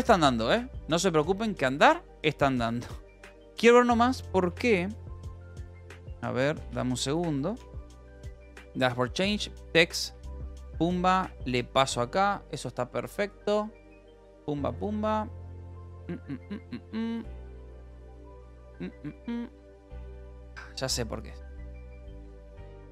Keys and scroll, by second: 4.4 k, 5.7-7.3 typing, 7.3 Up, 7.5 Return, 10.1-12.0 typing, 22.1-22.9 typing.